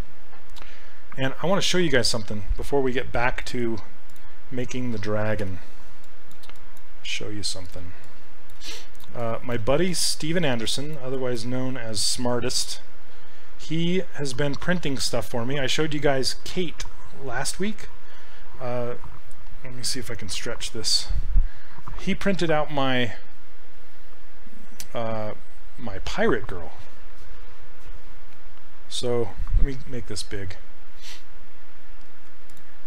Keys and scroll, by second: 5.5 f.